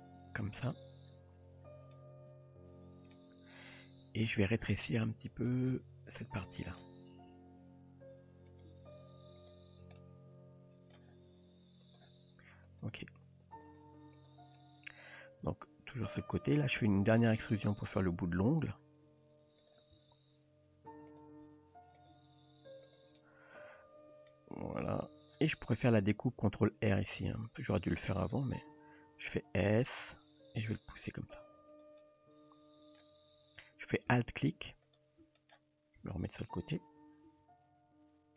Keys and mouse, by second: 0.0 g, 1.9-3.2 middle drag, 3.7 middle click, 5.5 click, 6.4 middle click, 7.3 r, 8.7 g, 10.0-10.9 middle drag, 11.9 click, 12.7 drag, 13.6 click, 15.4 KP_3, 19.1 e, 20.0 s, 21.4 r, 22.1 g, 23.2-24.3 middle drag, 24.8 s, 26.6 ctrl+r, 28.8 s, 30.0 middle click, 31.0 g, 32.1-33.0 middle drag, 35.4 middle click, 36.0 KP_3, 37.3 g.